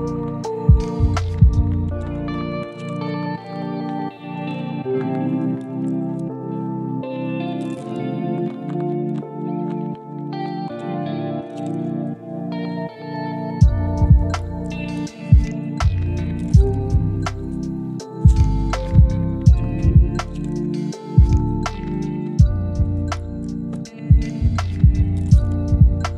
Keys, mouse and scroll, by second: 0.3 click, 0.5 g, 1.1 click, 1.3 g, 2.5-4.1 middle drag, 4.3 KP_1, 4.8 g, 5.3 click, 5.5 g, 6.1 middle click, 6.7 drag, 7.2 click, 7.9 e, 11.7 s, 12.4-13.2 middle drag, 13.6-14.3 middle drag, 15.4-15.9 scroll down 1, 16.0-16.4 ctrl+z, 16.8 right click, 19.5 s, 20.9 e, 20.9 s, 21.6-22.0 middle drag, 22.2-22.5 shift+middle drag, 22.6-23.9 middle drag, 24.1 click, 24.7-26.1 middle drag.